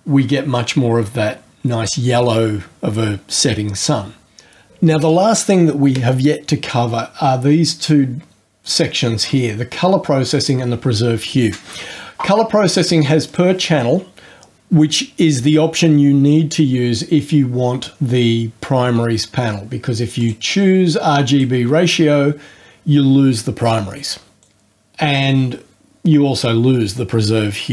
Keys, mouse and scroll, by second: 13.2 click, 20.1 click, 21.2 click, 24.4 click.